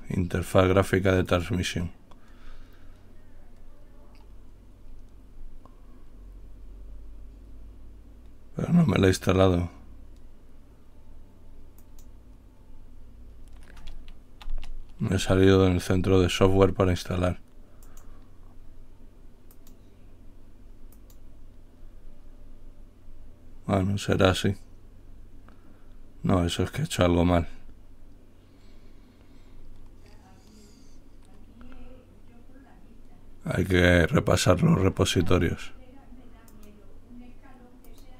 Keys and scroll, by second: 15.5 Return.